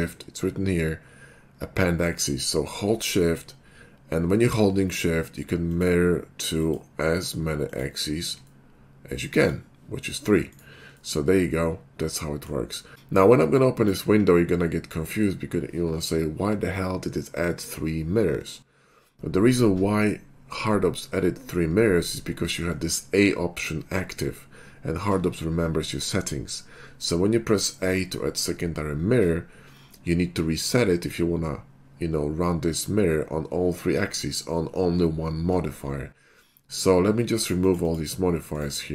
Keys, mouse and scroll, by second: 5.7 shift+click, 6.6 shift+click, 7.1-8.8 typing, 7.7 shift+click, 8.5-9.5 middle drag, 10.5 right click, 11.1-12.5 middle drag, 13.2 ctrl+`, 13.2 click, 37.4 click, 37.7 click, 37.9 click, 38.5 right click.